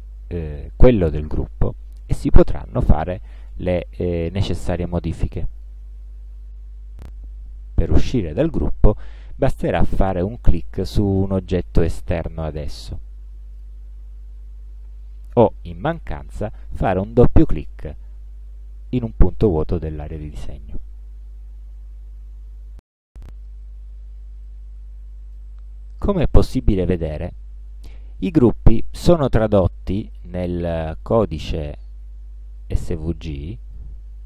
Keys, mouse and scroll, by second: 3.1 click, 5.7 shift+click, 12.2 click, 13.6 click, 17.5 click, 24.6-25.6 drag, 27.3 click, 30.2-31.4 drag, 33.4 click.